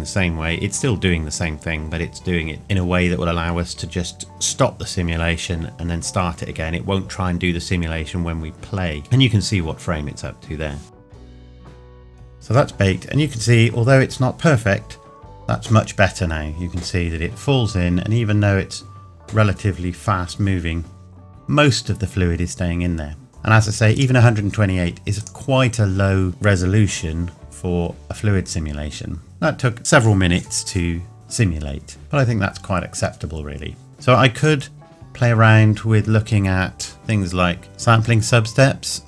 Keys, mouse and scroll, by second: 11.8 click, 18.1 scroll up 1, 21.4 scroll up 1, 23.3 click, 31.9 scroll down 1, 37.2 scroll up 1, 37.6 click.